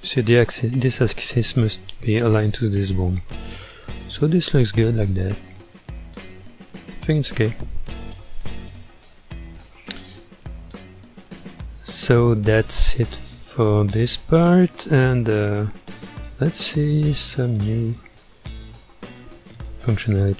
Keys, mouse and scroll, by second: 0.5-1.8 scroll down 2, 3.6-4.4 scroll down 3, 4.4 scroll up 2, 5.6-6.6 middle drag, 6.6-7.0 scroll up 2, 7.2-8.4 middle drag, 8.4 alt+z, 9.2 scroll down 4, 9.9 scroll down 3, 10.8-12.1 middle drag, 12.1-12.4 scroll down 1, 12.4-14.3 shift+middle drag, 14.3 click, 16.1 click, 18.0 space, 19.5-20.3 middle drag.